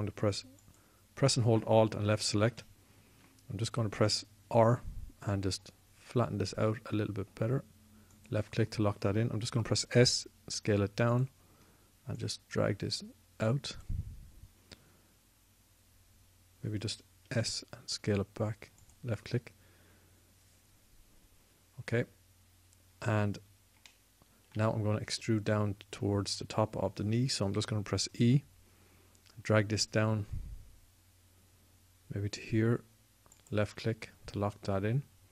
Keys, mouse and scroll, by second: 5.3 r, 9.0 click, 10.0 click, 10.3 s, 11.9 click, 18.0 s, 28.4 e.